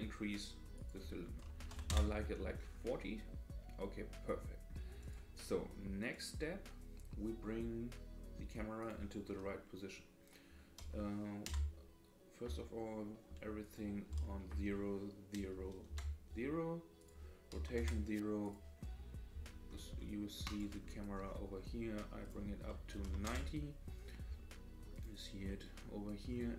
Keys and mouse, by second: 0.7-2.4 drag, 5.0 click, 6.1 click, 8.8-13.3 drag, 12.5 Tab, 13.7-16.3 drag, 17.1-20.7 drag, 22.2-24.0 drag, 24.9 click, 25.4-26.2 middle drag.